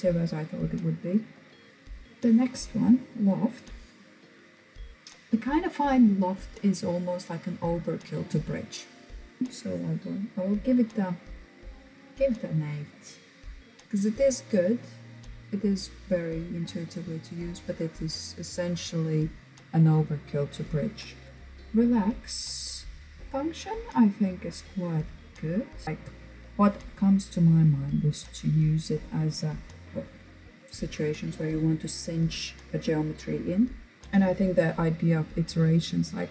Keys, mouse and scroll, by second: 10.3 click.